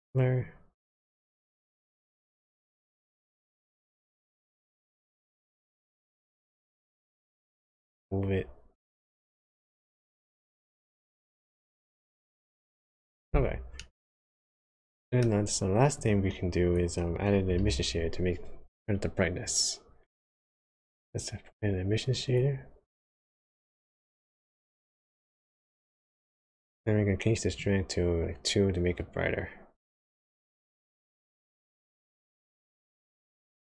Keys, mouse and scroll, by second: 5.9 middle click, 6.5 scroll up 1, 7.7 click, 13.8 middle click, 14.9 middle click, 15.9 click, 17.6 shift+a, 24.9 ctrl+shift+click, 27.6 click.